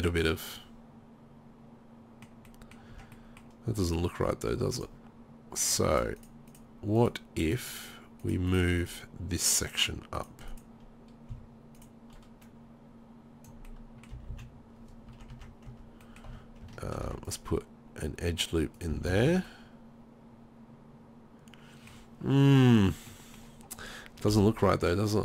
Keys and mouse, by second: 3.0 Tab, 4.8 click, 6.6-12.5 drag, 13.7 middle click, 14.1 middle click, 14.1 z, 14.3 z, 15.1 Tab, 15.3 Tab, 15.7 Tab, 16.3 Tab, 17.0 ctrl+r, 18.9 z, 19.1 z, 19.3 Tab, 22.9 drag, 24.3 KP_3.